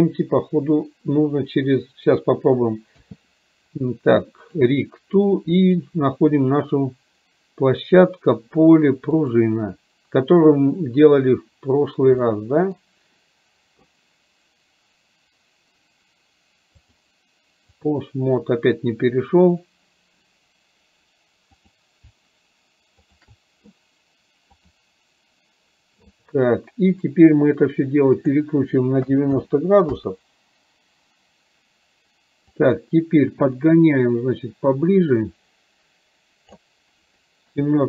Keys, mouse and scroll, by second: 5.9-9.5 drag, 12.4-12.9 middle drag, 16.9-18.0 drag, 21.6 click, 23.1 shift+click, 24.6-25.4 drag, 28.3-29.9 drag, 30.4 click, 32.6-36.6 drag.